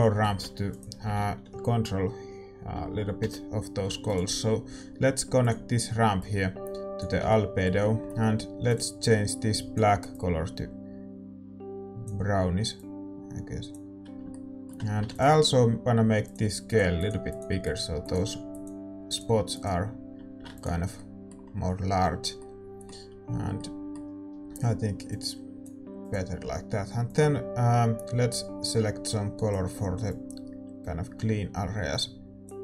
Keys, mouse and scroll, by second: 21.5-25.2 middle drag, 25.1-32.6 drag, 25.1 right click.